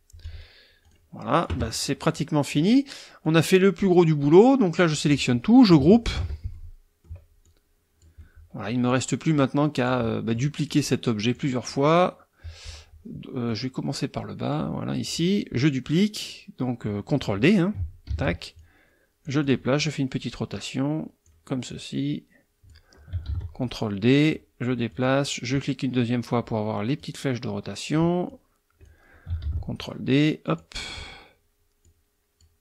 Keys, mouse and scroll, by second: 0.8 click, 2.5 click, 3.2-5.0 drag, 6.2 ctrl+g, 6.5 ctrl+middle click, 7.4-8.9 drag, 9.1-10.5 drag, 10.7-11.5 drag, 11.7 click, 13.5-15.2 drag, 18.1 ctrl+d, 18.6-19.7 ctrl+drag, 20.5-21.4 drag, 21.7-22.9 drag, 23.3 ctrl+d, 23.6-24.5 ctrl+drag, 24.9 click, 27.0-28.1 drag, 28.3-29.0 drag, 29.4 ctrl+d, 29.8-30.7 ctrl+drag, 30.9 click, 31.8-32.6 drag.